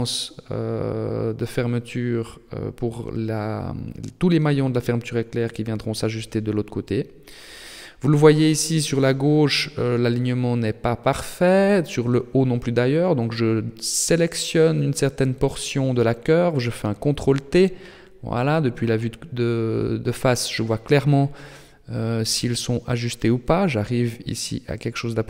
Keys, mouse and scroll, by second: 0.5 KP_3, 1.4 KP_1, 2.6 shift+middle click, 3.3-3.7 scroll up 4, 3.8 scroll down 1, 4.7 shift+middle click, 5.3-6.0 scroll up 2, 6.0-6.6 scroll down 6, 6.6 shift+middle click, 7.4 shift+middle click, 8.9 shift+middle click, 10.6 a, 12.0 b, 16.4 ctrl+t, 24.7 middle click.